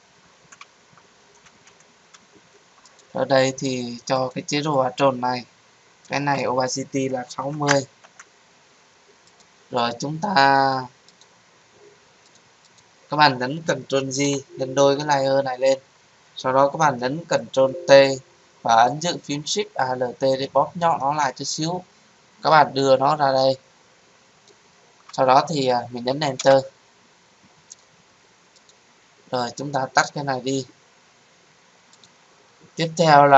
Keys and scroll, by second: 14.2 ctrl+j, 17.3 ctrl+t, 26.3 Return.